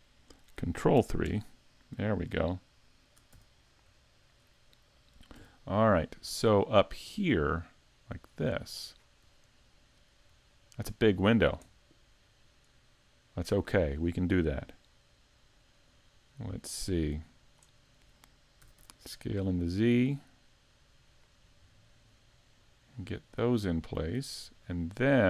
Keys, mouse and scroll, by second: 1.3 ctrl+KP_3, 2.9 shift+middle click, 3.3 z, 3.7-4.0 scroll up 1, 4.0 shift+middle click, 5.3 g, 9.0 click, 9.0-9.4 scroll up 5, 9.4 shift+middle click, 10.2-10.6 scroll up 2, 10.5 shift+middle click, 15.9 click, 18.6 s, 21.2 click, 23.7 click.